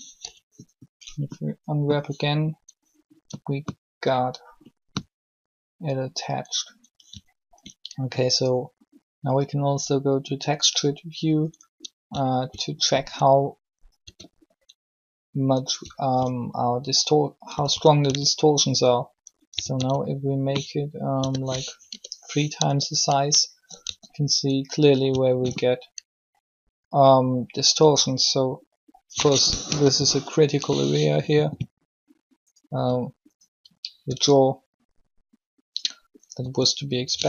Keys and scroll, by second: 0.0-0.2 typing, 14.0 a, 17.5-18.0 typing, 19.5 typing, 21.1 s, 21.8 3, 22.6 Tab, 23.8 alt+shift+a, 29.6 3, 32.7 r, 34.0 r, 36.4 r.